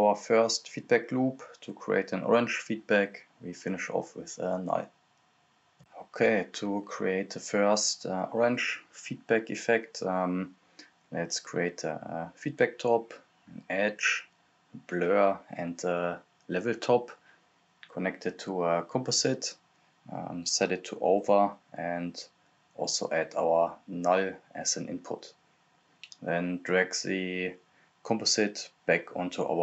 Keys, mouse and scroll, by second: 0.5 right click, 1.1-2.3 typing, 2.8 click, 5.1 scroll down 1, 6.5 click, 6.8-7.2 scroll down 1, 7.2 click, 7.9-9.8 typing, 8.7 right click, 10.1 click, 11.7-12.7 typing, 12.7 click, 15.1 right click, 15.3 e, 16.0 click, 16.9 right click, 17.0-17.7 typing, 17.8 click, 19.6 right click, 19.9-20.8 typing, 21.2 click, 22.8 right click, 23.1-24.1 typing, 24.4 click, 27.2-29.6 drag.